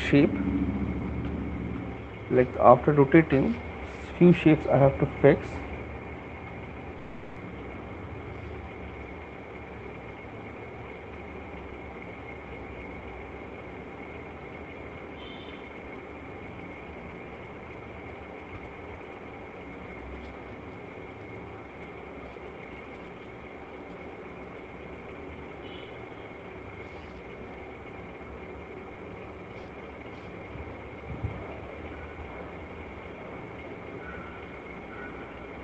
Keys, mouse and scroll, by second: 3.9 b, 6.6 click, 7.1-7.5 ], 7.9 [, 8.3 [, 8.6 [, 10.4-11.7 typing, 13.5-14.6 drag, 15.3 ], 15.5 ], 15.7 ], 17.5 click, 18.3 click, 19.2 click, 19.8 click, 20.6 middle click, 25.4 middle click, 25.4 click, 26.0 click, 26.4 click, 26.8 click, 28.4 right click, 29.8 click, 30.6 alt+click, 33.0 click, 34.8 shift+click.